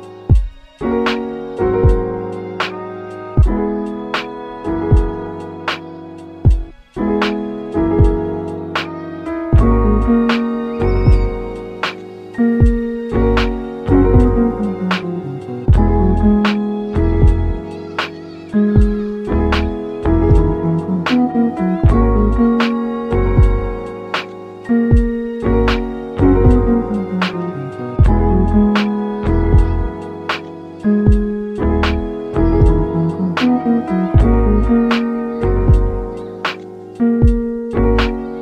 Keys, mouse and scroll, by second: 1.8-3.8 middle drag, 3.8 ctrl+3, 4.2 Tab, 4.7-5.9 middle drag, 5.9 ctrl+r, 7.8 middle click, 8.8 3, 9.0 click, 9.3 middle click, 9.8 s, 11.1-12.3 middle drag, 12.3 ctrl+r, 16.0-17.7 middle drag, 17.7 3, 18.1 click, 19.0-19.3 middle drag, 19.3 shift+click, 19.8 shift+click, 20.3 shift+click, 20.7-21.3 middle drag, 21.3 g, 22.9-24.6 middle drag, 24.6 Tab, 24.9-25.9 right drag, 25.9 g, 28.4 shift+d, 31.2 r, 33.5-34.9 scroll up 2, 34.9 KP_1, 37.0 click, 37.7 g.